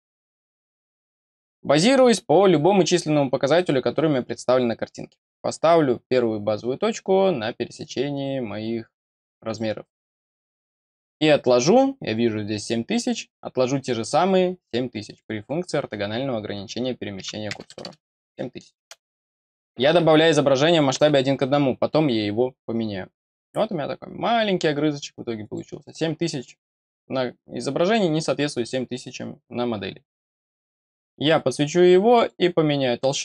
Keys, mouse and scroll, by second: 0.1-1.0 scroll up 1, 1.0 middle click, 5.0-8.7 scroll up 1, 9.4 click, 9.9 scroll down 1, 15.0 click, 23.6-24.7 scroll up 1, 25.3 click, 32.1 click, 32.9 scroll down 1.